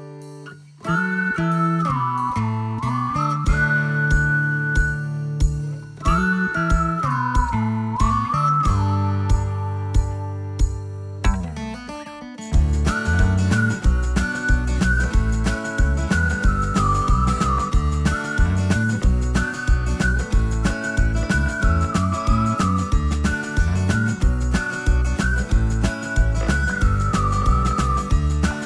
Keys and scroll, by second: 0.0-1.2 typing, 2.1 Left, 2.6 Left, 5.6 Right, 5.7 Right, 6.7-8.5 typing, 13.5 space, 16.1 Return, 16.4-18.1 typing, 19.4-20.9 typing, 21.3 Escape.